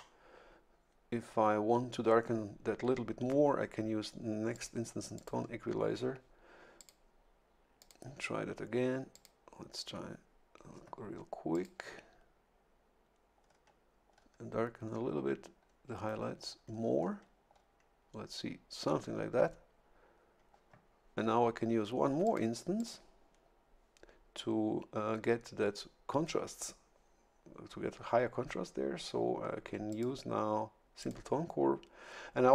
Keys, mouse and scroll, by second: 4.5 click, 5.1 click, 6.8 click, 7.8 click, 9.1 click, 11.5 click, 13.4-13.7 scroll down 2, 14.1 scroll down 2, 14.8 scroll down 2, 15.6-16.5 scroll down 4, 16.5-17.7 scroll down 4, 20.0-20.4 scroll up 2, 22.2 click, 22.8 click, 29.9 click, 31.0 click.